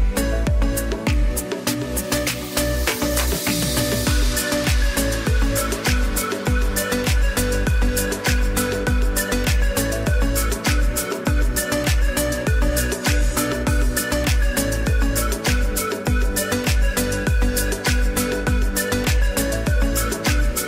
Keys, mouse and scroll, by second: 5.3 click, 7.9 click, 12.2 click, 12.8 space, 13.1 click, 13.5 space, 17.5 click.